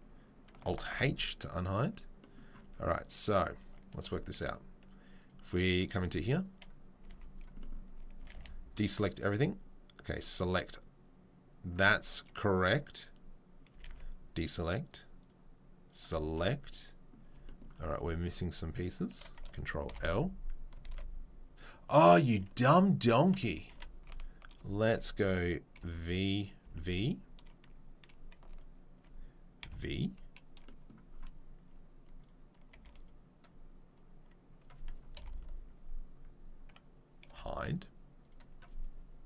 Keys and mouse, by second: 0.9 alt+h, 1.6-6.6 middle drag, 2.6 Tab, 3.5 Tab, 3.9 a, 6.6 click, 6.9-10.1 middle drag, 7.1 z, 8.2 a, 8.3 a, 10.1-14.9 right drag, 13.9 a, 14.9 middle click, 15.2 right click, 15.3-15.9 middle drag, 15.9-18.2 right drag, 18.2 shift+middle click, 18.8 shift+right click, 19.1-24.5 ctrl+middle drag, 20.0 ctrl+l, 20.9 ctrl+z, 23.7 2, 24.1 alt+right click, 24.9-32.2 alt+middle drag, 25.8 v, 26.6 v, 28.5 alt+right click, 32.2 click, 32.2 v, 32.2-37.7 middle drag, 34.9 1, 35.1 ctrl+l, 37.3 h, 37.7 click, 38.3-39.2 middle drag.